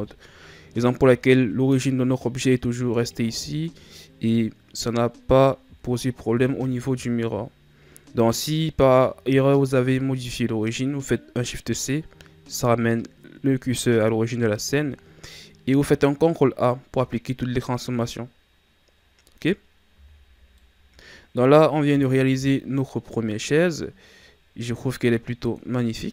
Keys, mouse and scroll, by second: 6.3 KP_3, 19.9 a, 20.2-20.5 scroll down 1, 20.5-21.9 middle drag, 21.9-22.7 shift+scroll down 2, 22.7 scroll down 1, 23.0-26.1 middle drag.